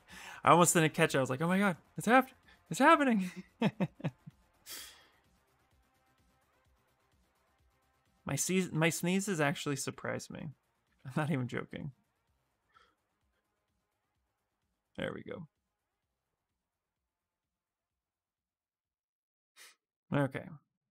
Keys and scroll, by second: 10.6 y, 13.0 y.